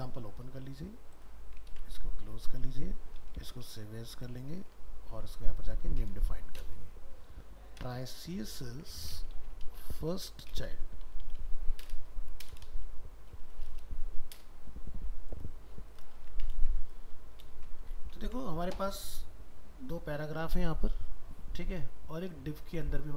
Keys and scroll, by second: 1.8 ctrl+w, 3.3 alt+f, 3.4 alt+秄, 4.7 ctrl+Tab, 6.6 ctrl+shift+Left, 8.6 ctrl+shift+Right, 16.2 ctrl+a, 16.5 ctrl+c, 17.1 ctrl+a.